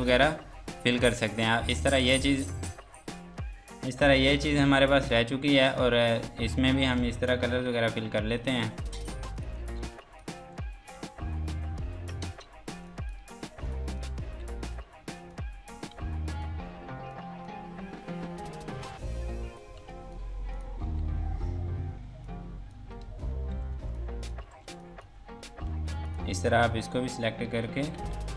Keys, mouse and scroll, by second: 1.9 click, 7.0 alt+Num_Lock, 7.3-8.0 typing, 8.4 click, 9.8 F2, 9.9 click, 10.7 scroll down 1, 11.4 g, 12.2 space, 12.7 F2, 12.9 click, 14.2 g, 19.2 ctrl+space, 19.5 click, 19.8 F2, 19.9 click, 20.8 g, 21.2 scroll down 1, 22.2 click, 23.1 ctrl+space, 23.5 F3, 24.0 click, 24.4 Escape, 24.6 F2, 24.8 click, 27.9-28.3 typing.